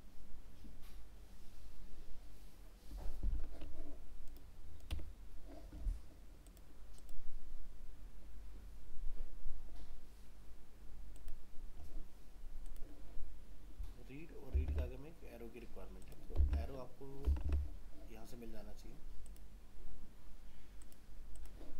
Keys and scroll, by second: 14.7 alt+Tab.